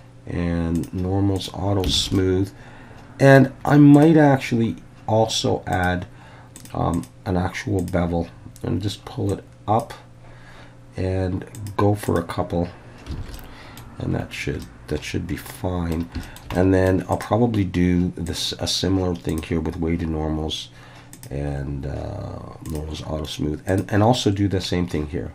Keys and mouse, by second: 0.8 click, 1.4 click, 2.0 alt+a, 2.1-3.4 middle drag, 5.8 click, 6.6 click, 6.9-7.9 drag, 9.3-9.9 drag, 11.5 click, 12.1 click, 13.2 alt+a, 13.3-13.8 middle drag, 14.6-15.9 middle drag, 16.2 shift+middle drag, 16.5-16.9 middle drag, 18.3-19.4 drag, 21.2 drag, 22.6 click, 23.7 click.